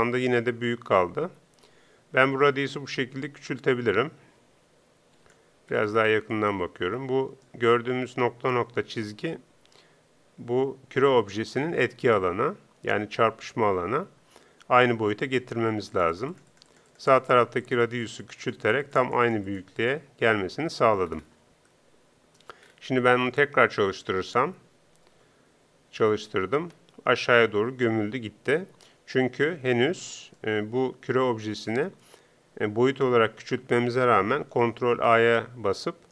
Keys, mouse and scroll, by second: 2.5-4.2 drag, 5.7-6.4 scroll down 1, 6.4 middle click, 6.7-15.9 middle drag, 15.9-21.7 drag, 25.1 p, 26.7 p, 34.8 ctrl+a.